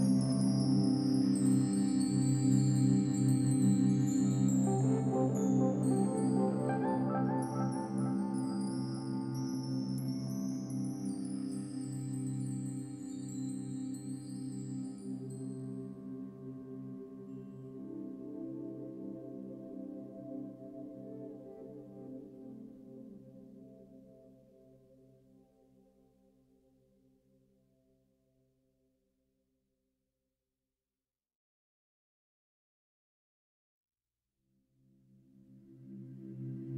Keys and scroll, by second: 1.1 ctrl+d, 5.8 ctrl+d, 6.6 ctrl+-, 8.6 ctrl+=, 8.9 ctrl+-, 9.4 ctrl+-, 9.6 space, 11.6 space, 13.3 ctrl+alt+shift+n, 13.4 ctrl+alt+g, 13.8 ctrl+-, 14.1 space, 14.9 space, 33.9 ctrl+=, 34.2 space, 36.1 ctrl+z.